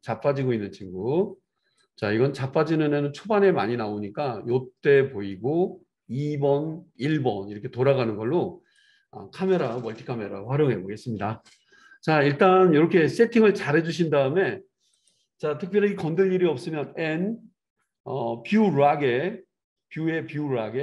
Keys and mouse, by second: 15.1-20.8 middle drag, 16.8 n.